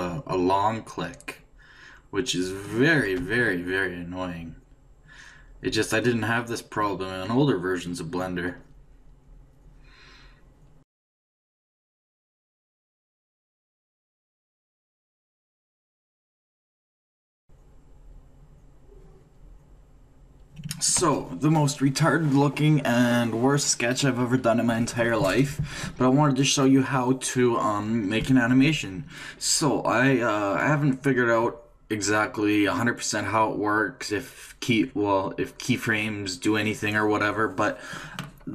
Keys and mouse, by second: 4.7-6.5 drag, 9.5 click, 12.9 d, 13.0-14.1 drag, 14.5 d, 14.8 click, 15.7-20.9 d, 16.1 click, 17.1 click, 23.4 d.